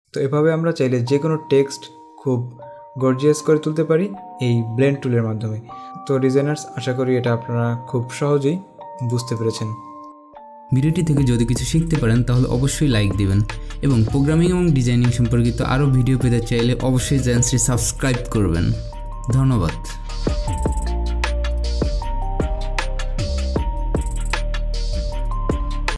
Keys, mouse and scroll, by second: 9.1 click.